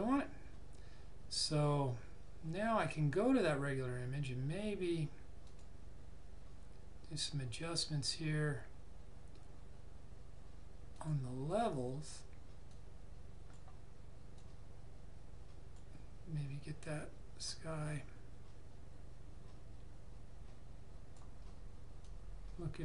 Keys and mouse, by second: 2.7 click, 5.4 click, 10.9 click.